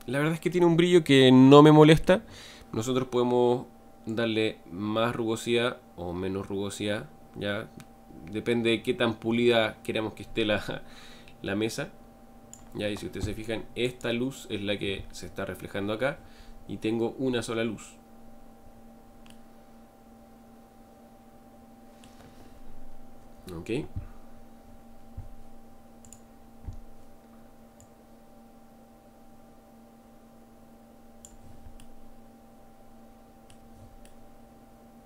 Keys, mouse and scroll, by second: 0.5-4.2 middle drag, 4.2-7.1 drag, 16.6-17.3 scroll down 3, 17.3 scroll up 1, 17.6-18.6 scroll down 2, 18.6-19.3 scroll up 2, 19.3-23.1 middle drag, 23.1-24.3 scroll up 4, 24.3-24.6 scroll down 1, 24.6 scroll up 2, 28.1 click, 31.8-35.0 middle drag.